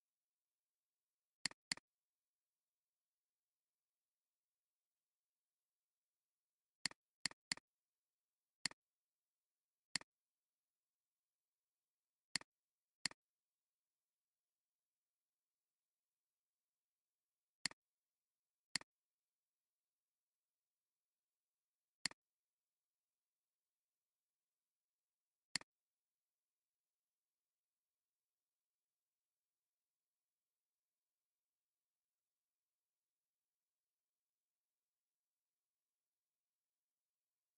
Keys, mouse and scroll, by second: 1.6 double click, 7.3 double click, 14.0 double click, 17.2 alt+scroll down 1, 17.5 space, 18.0 space, 18.4 alt+scroll down 1, 18.7 space, 26.2 click, 26.2 click, 26.6 click.